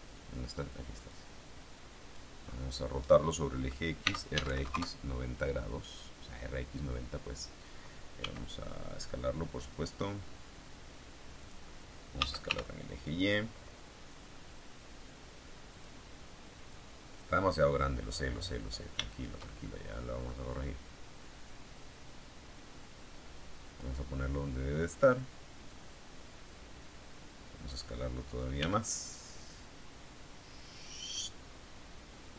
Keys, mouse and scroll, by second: 1.0-2.4 drag, 2.4-3.1 scroll up 2, 3.9 r, 4.4 KP_9, 4.5 KP_0, 4.7 KP_Enter, 8.1 s, 11.3 click, 12.1 s, 12.4 y, 15.6 click, 16.6-17.9 drag, 17.9-18.9 scroll up 1, 18.9-20.3 shift+middle drag, 21.4-23.9 drag, 24.0-24.8 scroll up 1, 25.6-27.8 drag, 28.5 s, 31.1 click.